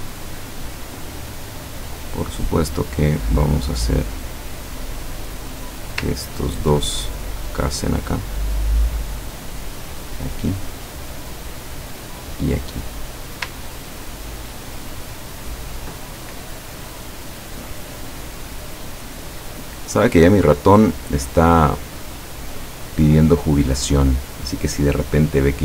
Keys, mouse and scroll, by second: 2.0 click, 3.3-4.7 drag, 5.0 click, 6.2-6.7 ctrl+scroll up 2, 6.9-8.4 ctrl+drag, 9.1 click, 11.0 click, 11.4-12.9 drag, 13.8 ctrl+scroll down 1, 14.4-15.6 ctrl+middle drag, 15.8 ctrl+scroll down 1, 16.4 ctrl+scroll down 1, 17.4 ctrl+middle click, 18.4-18.8 ctrl+scroll down 1, 19.1-20.1 ctrl+middle drag, 20.4 ctrl+scroll up 2, 22.3 click.